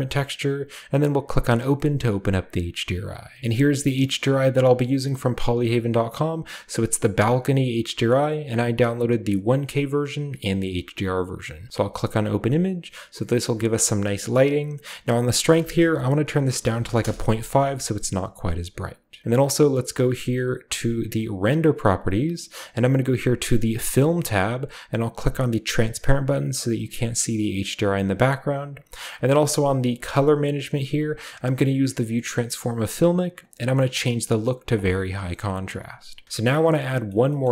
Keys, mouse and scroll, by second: 3.4 Return, 3.4 typing, 3.9 click, 11.6 click, 13.1 scroll up 1, 15.2 click, 16.7 typing, 16.9 Return, 20.1 click, 21.1 click, 21.8 click, 23.9 click, 25.7 click, 27.9 click, 33.3 click, 34.7 click, 35.8 click, 36.8 middle drag, 37.1 middle drag, 37.1-37.5 scroll down 2, 37.4 middle drag.